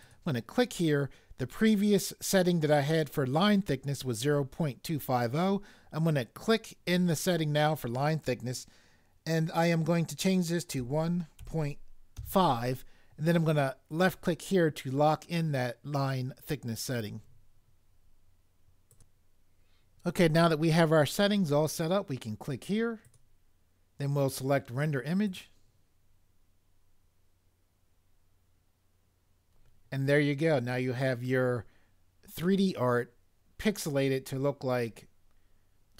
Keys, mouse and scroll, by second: 10.8 1, 11.4 ., 12.1 5.